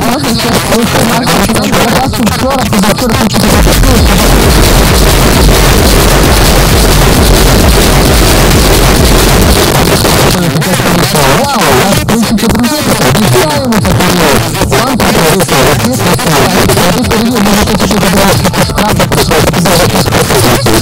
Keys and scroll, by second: 9.5 Page_Down.